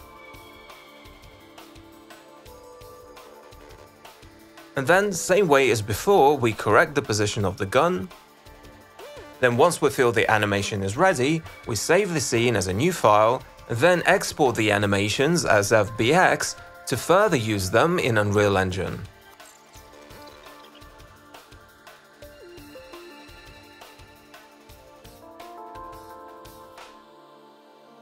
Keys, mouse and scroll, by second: 0.0 click, 0.4 click, 0.9 click, 1.2 click, 1.4 click, 6.3 click, 8.2 click, 8.3 click, 8.5 click, 8.7 click, 9.1 click, 9.4 shift+click, 9.6 shift+click, 9.7 click, 10.1 middle click, 10.3 e, 11.2 alt+click, 11.8 w, 12.4 click, 12.4 e, 13.4 click, 13.9 click, 15.0 click, 15.7-16.7 drag, 17.4 click, 21.4 click, 26.6 click.